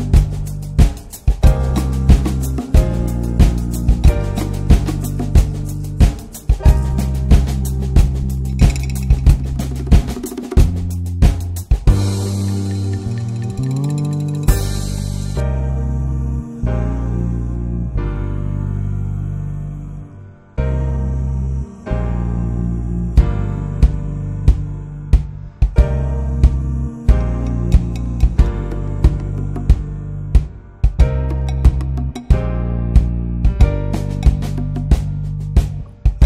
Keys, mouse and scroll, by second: 0.6-1.1 scroll up 2, 1.1 2, 1.6 alt+shift+click, 2.0 alt+shift+click, 2.8 x, 4.2-4.8 scroll down 1, 4.8 Tab, 5.0 Tab, 5.3 alt+z, 5.6-7.1 drag, 9.1 Tab, 9.4 alt+z, 9.5 click, 9.7-10.6 right drag, 10.6 Tab, 10.8 middle click, 11.6 2, 11.8 click, 12.5 alt+shift+click, 12.8 s, 15.2 click, 15.8 Tab, 16.1 Tab, 16.6 3, 16.7 click, 17.2 alt+shift+click, 17.7 s, 19.9 s, 20.5 Tab, 20.8 scroll down 4, 21.0 alt+middle click, 21.2 click, 21.5 ctrl+s, 21.8 alt+middle click, 22.0 click, 22.2 ctrl+s, 22.3 scroll up 2, 22.4 Tab, 22.9 click, 23.1 l, 24.1 shift+d, 24.7 ctrl+s, 25.1 click, 26.6-26.9 scroll down 1, 26.9 Tab, 27.2-27.6 middle drag, 27.6 Tab, 27.7-28.2 scroll up 2, 27.8 middle click, 28.2 alt+middle click, 28.4 alt+z, 28.6 shift+middle click, 28.8 scroll up 1, 29.0 alt+z, 29.3 alt+z, 29.5 click, 30.4 alt+z, 30.9 alt+z, 31.2 shift+click, 32.2 alt+z, 32.9 ctrl+z, 33.2-34.0 scroll up 2, 34.0 alt+z, 34.4-36.0 ctrl+drag, 36.0 alt+z.